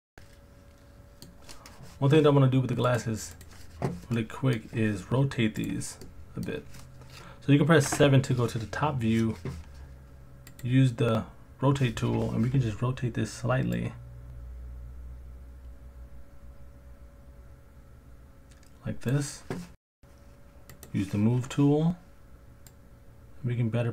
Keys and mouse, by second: 0.9 middle click, 2.9 click, 4.1-4.5 middle drag, 6.0-6.4 middle drag, 7.9 KP_7, 10.5 click, 13.9 click, 14.6 click, 20.8 click, 22.7 click.